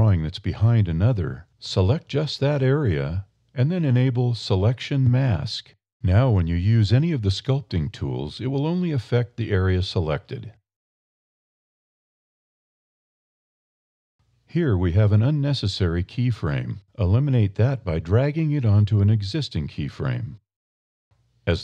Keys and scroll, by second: 4.2 1, 7.6 e.